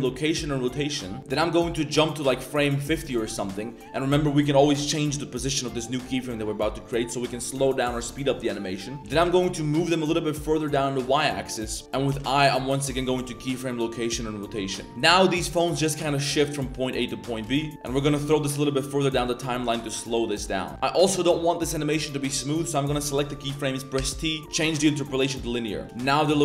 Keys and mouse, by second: 1.2-2.8 drag, 11.7 click, 12.1 Tab, 14.3 click, 14.9 space, 15.3-16.1 drag, 17.5 space, 19.6-20.1 drag, 20.2 space, 21.2 click, 25.8 space, 26.0-26.4 drag.